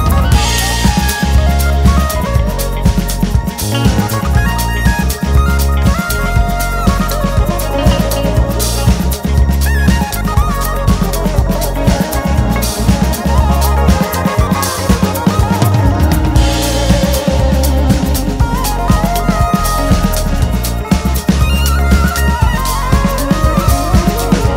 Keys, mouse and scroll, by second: 0.1 `, 0.7 ctrl+r, 2.5 KP_3, 3.7-4.2 scroll down 2, 4.2 f, 6.0 ctrl+z, 10.3 KP_7, 11.1 `, 13.9 g, 15.1 `, 15.6-15.9 scroll up 1, 15.9 click, 16.4 shift+click, 17.0 g, 18.3 `, 18.5 scroll up 1, 19.1 2, 19.3 click, 20.0 shift+click, 20.5 e, 21.5 scroll up 1, 21.9 `, 22.7 click, 23.1 KP_Decimal, 23.4-23.7 scroll down 1, 23.9 `.